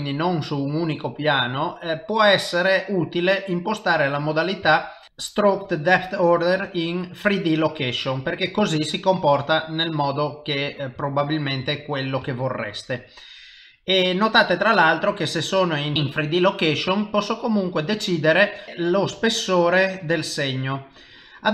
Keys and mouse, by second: 3.7 middle click, 4.7 shift+middle click, 5.0 middle click, 5.0 click, 6.4 click, 7.6 middle click, 8.0 middle click, 11.1 shift+middle click, 11.7 ctrl+middle click, 12.3 shift+middle click, 14.0 middle click, 14.7 c, 15.1 click, 15.3 s, 15.9 click, 16.6 middle click, 19.9 s.